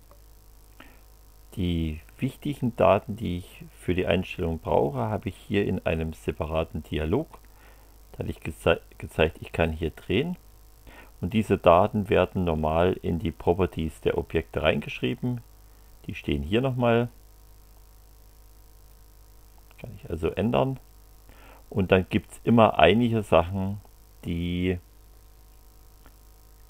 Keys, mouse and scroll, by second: 8.3-10.9 drag, 17.1 click, 18.9 click, 20.3 click.